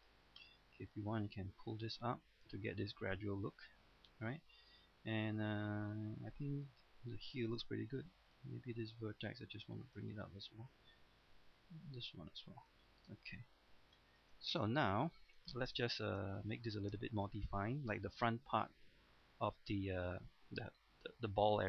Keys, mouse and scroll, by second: 3.3 middle click, 4.5-4.8 scroll down 1, 4.8 middle click, 5.9-6.2 scroll up 1, 6.2 middle click, 6.8-7.4 scroll up 1, 7.6 ctrl+Tab, 8.3 click, 8.7 right click, 9.3 click, 10.2 middle click, 11.3 right click, 11.8-12.9 drag, 12.9 scroll down 1, 13.1 middle click, 13.8 scroll down 1, 14.0 shift+middle click, 15.5 middle click, 16.5 middle click, 17.3 middle click, 18.0-18.3 scroll up 1, 18.9 middle click, 19.5-19.8 scroll down 1, 20.8-21.6 scroll up 1.